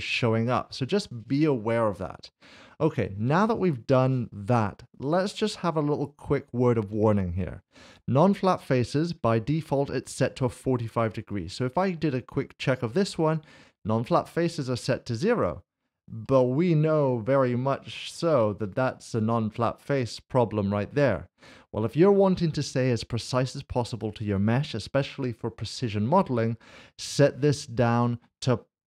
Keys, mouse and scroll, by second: 3.5 click, 5.2 s, 5.3 shift+middle click, 8.3 click, 8.5 middle click, 11.5 click, 16.2 click, 16.4 middle click, 27.8 middle click, 28.8 click.